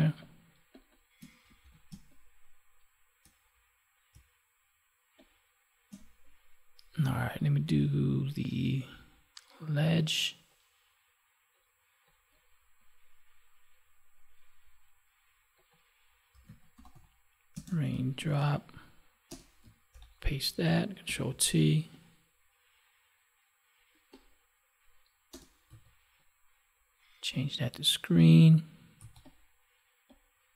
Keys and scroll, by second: 1.6 ctrl+s, 1.9 space, 17.5 space, 19.9 ctrl+v.